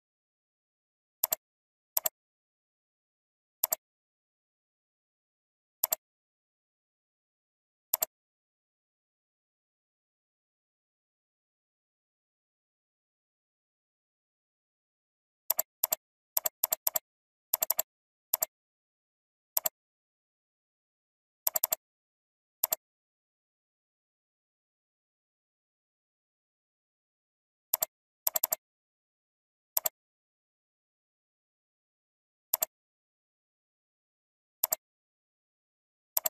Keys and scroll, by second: 1.5 ctrl+space.